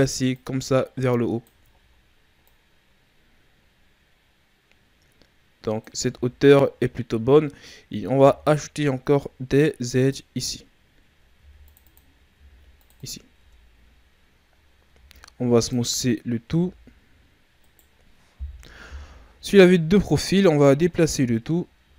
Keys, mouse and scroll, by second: 0.3 click, 1.7 shift+scroll up 4, 2.4 click, 6.0 z, 8.1 ctrl+r, 11.3 ctrl+r, 12.3 ctrl+r, 13.3 Tab, 14.8 w, 16.4 a, 16.9-17.6 scroll down 1, 17.6 right click, 18.8 KP_3, 20.2-20.6 ctrl+scroll up 2, 20.6 Tab, 20.9 a, 21.8 a.